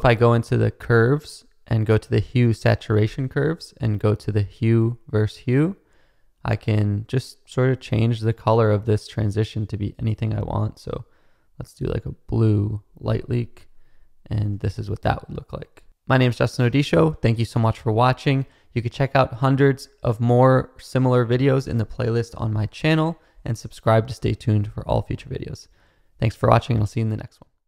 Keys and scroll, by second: 14.4 space, 20.4 space.